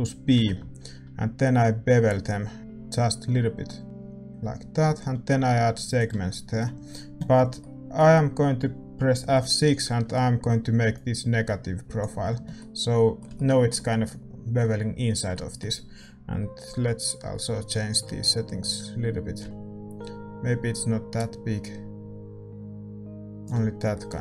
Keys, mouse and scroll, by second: 0.3 ctrl+b, 6.2-10.9 middle drag, 10.9 F6, 12.5-19.4 drag, 19.4 F6, 23.9-24.2 drag.